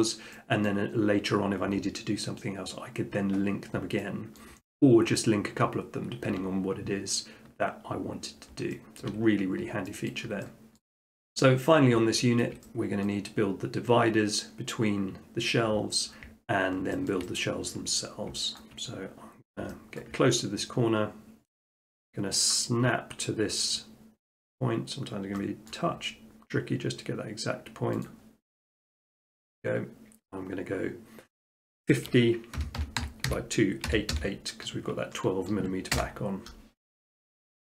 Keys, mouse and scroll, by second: 0.7-1.8 middle drag, 3.8 middle click, 4.4 shift+middle click, 8.1 middle click, 9.0 shift+middle click, 10.1 shift+middle click, 10.8 middle click, 11.3 click, 12.4 shift+middle click, 13.1 middle click, 16.8 middle click, 17.1 shift+middle click, 17.4 middle click, 17.8-18.3 scroll, 18.6 middle click, 18.9 middle click, 19.1-19.5 middle click, 19.2 middle click, 19.6 shift+middle click, 20.0 shift+middle click, 20.3 middle click, 20.5 middle click, 20.8 scroll, 25.7-26.7 scroll, 28.1 click, 28.6-29.1 scroll, 32.6-33.9 typing, 35.9 Return, 37.0-37.6 middle drag.